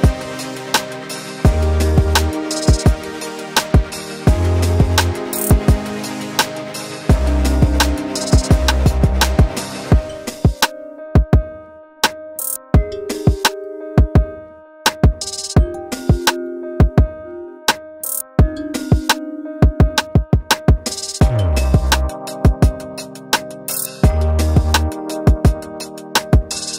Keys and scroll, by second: 1.2 ctrl+Return, 5.3 v, 18.3 Down, 20.0 Up, 24.9 Return.